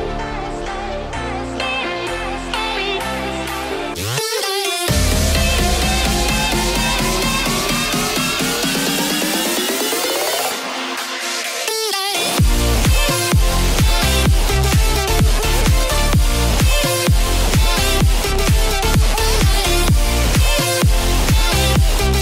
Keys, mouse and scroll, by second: 0.9 z, 1.5 click, 6.0-8.3 drag, 9.2 click, 11.5 click, 15.1 Tab, 17.0 Tab, 17.7-18.5 drag, 19.6 Tab, 20.0-20.8 scroll up 1, 20.8 click.